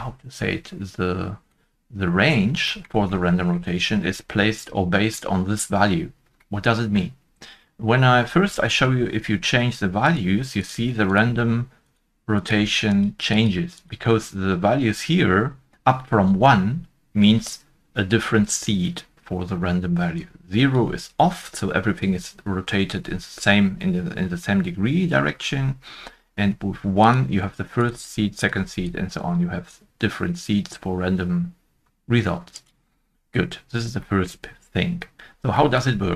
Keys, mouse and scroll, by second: 1.4 scroll up 1, 1.5 middle click, 2.2-2.6 scroll down 1, 3.6 middle click, 3.6-4.3 scroll down 1, 6.8 middle click, 22.8 middle click, 25.4 scroll down 1, 32.5 click, 32.5-33.3 scroll down 1, 33.3-33.7 scroll up 1, 34.0 shift+middle click, 34.0-35.0 scroll up 1, 35.1-36.1 scroll up 1.